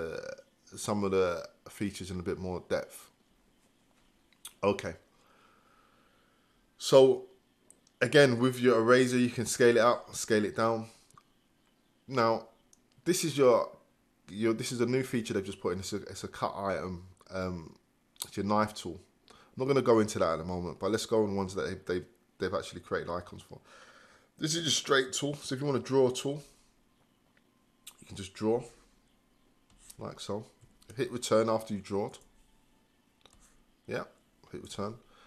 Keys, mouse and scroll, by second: 32.2 Return, 34.7 Return.